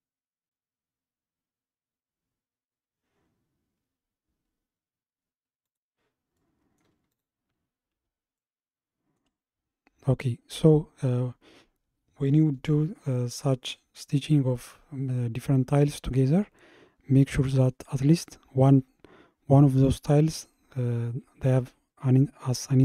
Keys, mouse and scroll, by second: 6.4-7.1 middle drag, 7.1 click, 8.4-11.5 shift+middle drag.